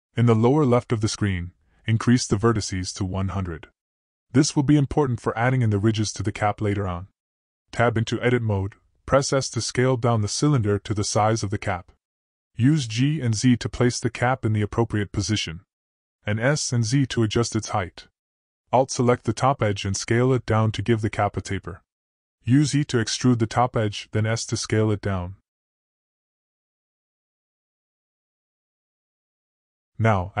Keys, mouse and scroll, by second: 0.5 click, 2.0-4.2 drag, 3.1 0, 6.1 Tab, 7.8 s, 9.1 g, 11.1 s, 13.3 g, 16.6 shift+middle drag, 19.6 s, 22.7 e, 24.6 s.